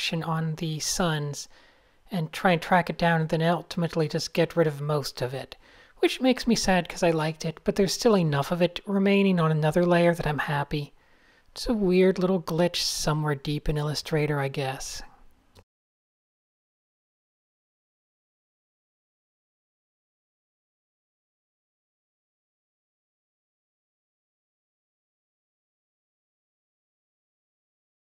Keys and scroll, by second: 0.4 Tab, 0.8 alt+shift+super+s, 3.1-4.0 typing, 10.7 Tab, 14.4 alt+shift+super+d, 14.8 alt+shift+super+s, 17.7 alt+shift+super+s, 20.5 super+z, 21.2 alt+shift+super+s, 25.1 a, 27.1 alt+shift+super+s.